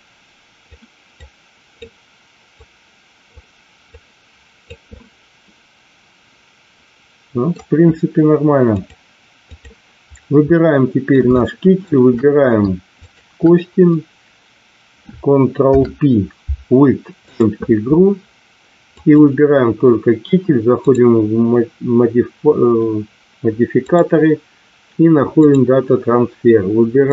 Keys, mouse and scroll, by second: 1.1 click, 2.6 click, 3.9 click, 4.9-7.4 middle drag, 8.8 click, 10.5-11.0 middle drag, 11.4 shift+middle click, 15.5 ctrl+p, 18.9 click, 20.9 click, 23.8-25.5 drag, 27.0 click.